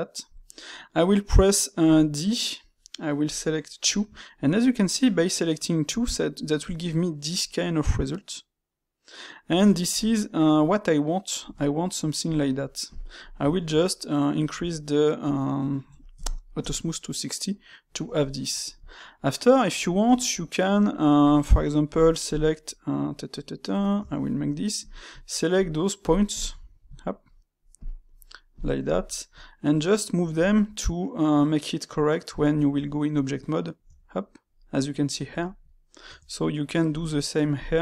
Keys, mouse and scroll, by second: 3.7-12.9 middle drag, 13.1 click, 13.4 shift+q, 17.5-20.0 middle drag, 20.0 Tab, 21.1 click, 21.8 shift+click, 22.9 middle click, 23.9 Tab, 24.7 click, 25.4 shift+click, 26.0 shift+click, 26.2 shift+click, 26.5-27.8 middle drag, 28.0 shift+click, 28.4 shift+click, 28.8 shift+click, 29.0-30.3 middle drag, 30.3 s, 33.4-33.8 middle drag, 33.8 Tab, 34.5-36.0 middle drag, 36.0 Tab, 36.8 click, 37.5 shift+click.